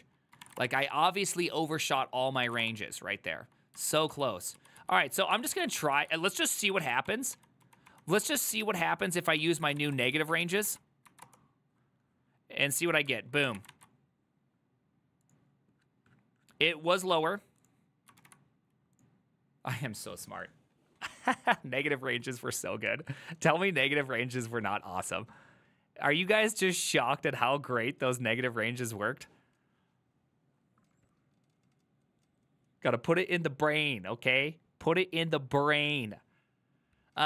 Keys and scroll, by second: 0.5 typing, 0.7 Return, 2.6 typing, 2.7 Return, 4.0 ctrl+u, 4.2 ctrl+u, 4.7 ctrl+u, 4.9 ctrl+u, 5.4 ctrl+c, 5.5-6.3 typing, 7.2 ctrl+d, 7.4 ctrl+d, 8.0 ctrl+d, 9.6 ctrl+c, 9.6-10.5 typing, 10.8 ctrl+c, 11.2 Up, 11.3 Return, 13.5 ctrl+c.